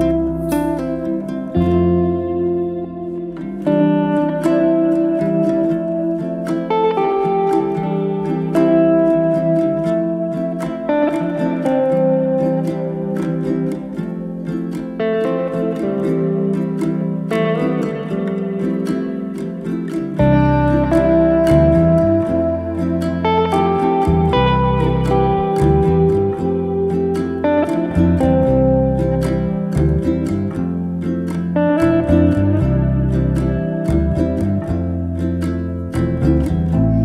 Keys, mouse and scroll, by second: 0.6 alt+shift+click, 1.2 ctrl+b, 2.9-3.5 middle drag, 3.5 click, 4.0 2, 4.1 click, 4.7 alt+click, 5.6 ctrl+b, 7.9-9.3 middle drag, 9.3 scroll up 1, 9.6 1, 10.1 click, 10.6-11.1 middle drag, 11.1 click, 11.7 middle click, 12.3 m, 12.8-14.9 middle drag, 15.9 alt+z, 16.2 click, 17.4 s, 18.4 click, 19.0 s, 20.4 click, 21.1 s, 22.2 click, 22.7 s, 23.8 middle click, 24.4 alt+z, 24.5 scroll down 2, 24.7 middle click, 25.1-25.7 scroll down 3, 25.7-27.2 middle drag, 27.3 Tab, 27.5-28.3 middle drag, 28.3-29.0 scroll up 1, 29.0 Tab, 29.3-30.8 middle drag, 31.2 click, 31.8 middle click, 32.5 alt+z, 32.7 middle click, 33.6 2, 33.8-35.1 middle drag, 35.1 KP_1, 35.5-35.8 scroll up 1, 35.8 click.